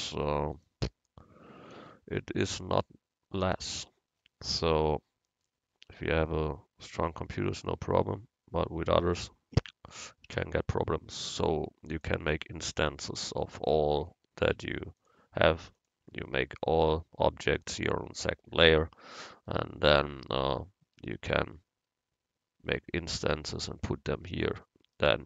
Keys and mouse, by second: 1.8 u, 3.9 Tab, 10.4 Tab, 14.5 u, 16.3 click, 22.8 Tab, 24.4 click, 24.6 right click, 25.0 click, 25.2 right click.